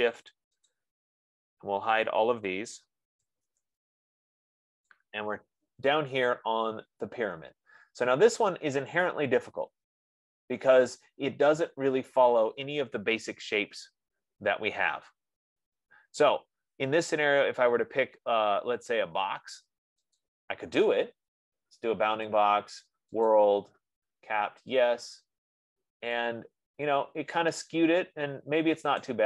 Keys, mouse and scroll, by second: 0.1 shift+click, 0.6 shift+click, 1.1 shift+click, 4.0 Return, 7.0 middle click, 7.8 F15, 20.7 click, 22.8 click, 23.6 click, 25.1 click.